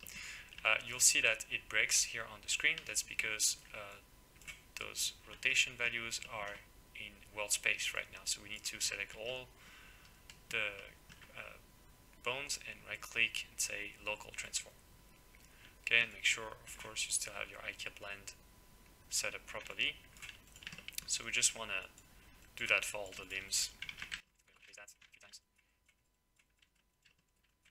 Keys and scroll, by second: 23.9 ctrl+c, 24.7 ctrl+v, 25.0 ctrl+v.